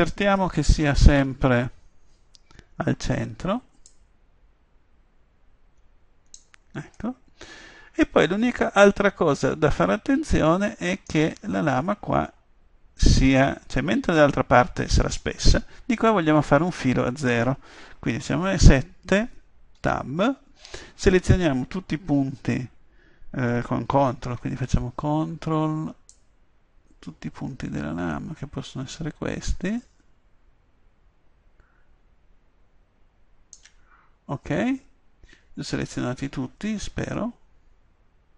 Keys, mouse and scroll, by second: 0.8 KP_3, 7.2 middle click, 14.0 middle click, 18.2 KP_7, 19.8 Tab, 26.1-37.2 drag, 37.4-38.3 middle drag.